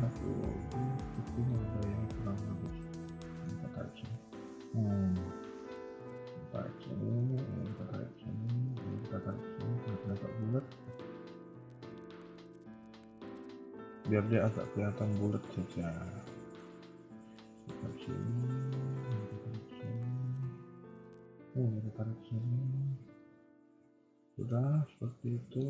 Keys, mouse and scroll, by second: 2.7 click, 3.0 middle click, 3.9 g, 5.7 click, 6.0 g, 7.5 click, 7.6 g, 8.7 click, 8.9 g, 10.2 middle click, 14.7 middle click, 17.2 click, 17.5 g, 19.0 click, 19.2 g, 21.2 click, 21.4 g, 22.3 middle click, 24.8 middle click.